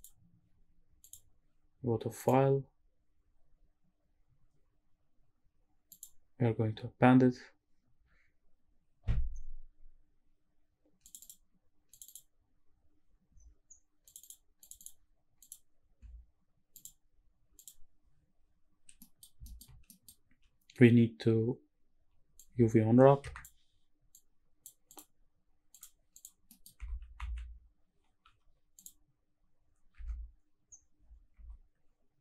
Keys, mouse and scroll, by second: 1.0 click, 2.2-6.0 drag, 15.4 click, 16.7-17.8 drag, 19.0 middle click, 19.5 shift+middle click, 19.9 middle click, 20.3 scroll down 1, 22.4-23.4 drag, 24.1 click, 24.9-25.8 drag, 26.2 click, 26.5 middle click, 26.9 Tab, 27.3 a, 28.4 u, 30.1 Tab, 30.6-31.1 scroll down 3, 31.5 Tab.